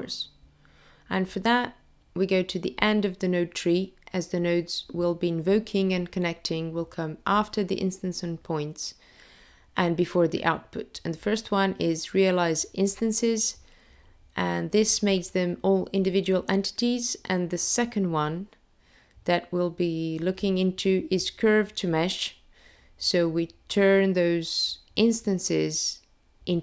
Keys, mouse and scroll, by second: 1.0 click, 2.8 shift+a, 2.9 click, 12.8 click, 13.6 shift+a, 13.8 click.